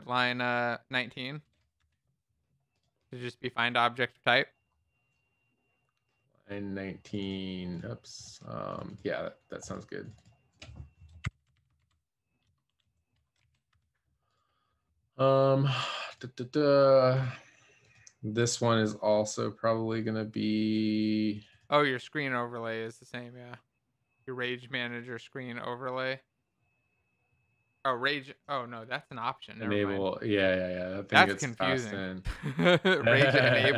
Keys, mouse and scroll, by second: 0.3 BackSpace, 1.7 Escape, 11.3-12.3 typing, 12.4 Return, 13.6 ctrl+s, 13.7 Escape.